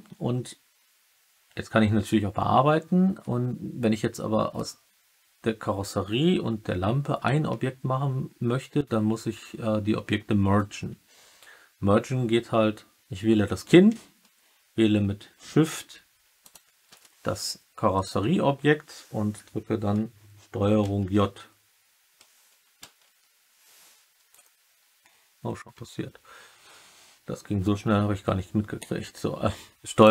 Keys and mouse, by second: 20.7 ctrl+j, 22.7 ctrl+j.